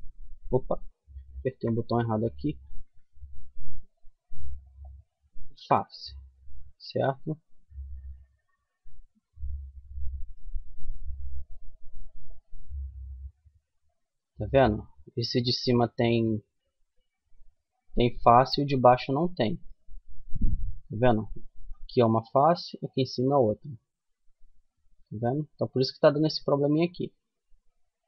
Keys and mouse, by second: 0.7 ctrl+z, 4.6-6.5 middle drag, 6.5 Tab, 7.1-8.9 middle drag, 9.6 Tab, 10.4 middle click, 16.8-20.7 middle drag, 20.7-23.3 right drag, 23.3 z, 24.1 z, 24.7-26.6 middle drag.